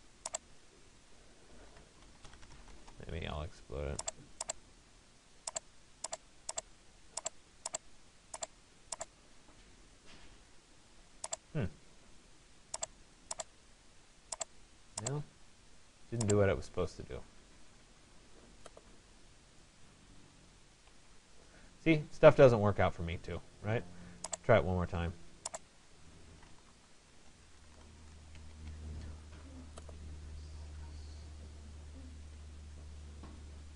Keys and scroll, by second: 2.4 Return, 20.5 Escape, 25.3 Escape.